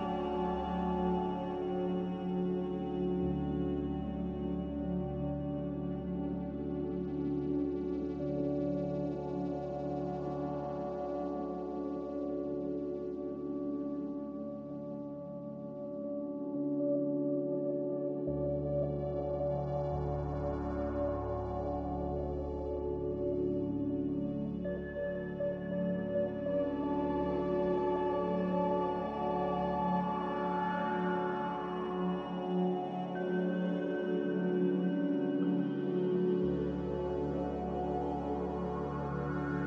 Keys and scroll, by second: 26.2 g.